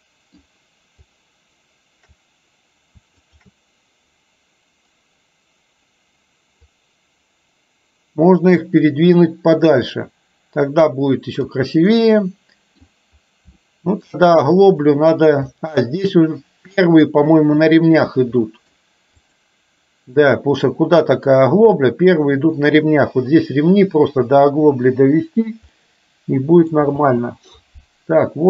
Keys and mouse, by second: 3.4 shift+drag, 6.8-11.7 drag, 12.0-12.9 middle drag, 13.8-14.2 shift+middle drag, 14.7 click, 15.5 middle drag, 16.8 middle click, 18.5 middle click, 19.3 click, 25.8-26.9 middle drag, 27.0 space.